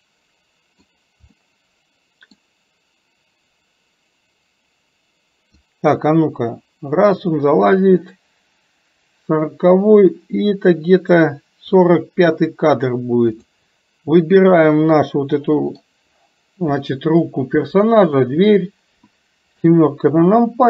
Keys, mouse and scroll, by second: 1.3-2.4 middle drag, 5.7-11.9 drag, 13.4 click, 14.1-15.9 middle drag.